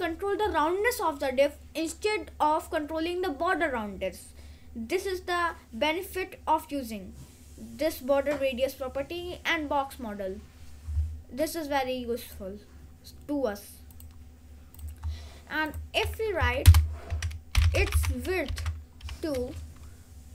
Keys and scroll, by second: 16.5 Up, 16.8 Return, 16.9-19.0 typing.